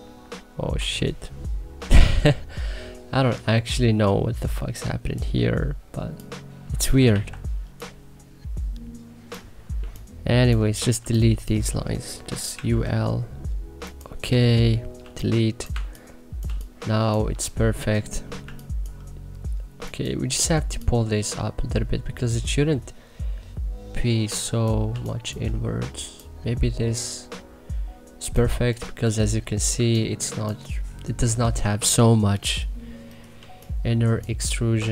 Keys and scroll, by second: 2.0 3, 7.1 ctrl+z, 9.7 3, 12.5 u, 12.8 l, 14.4 Delete, 15.0 3, 15.7 1, 16.4 3, 24.8 3, 29.7 2, 33.3 3.